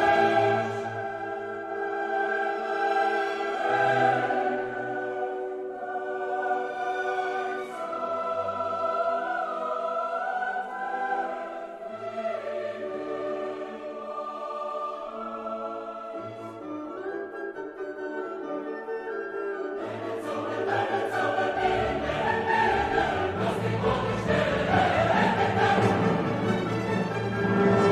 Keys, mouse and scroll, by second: 0.1 click, 4.2 click, 6.9 click, 8.0 0, 8.6 click, 9.5 1, 10.1 click, 13.6 click, 16.3-18.6 drag, 22.2 click, 24.1-25.4 drag, 25.6 middle click, 26.7 click.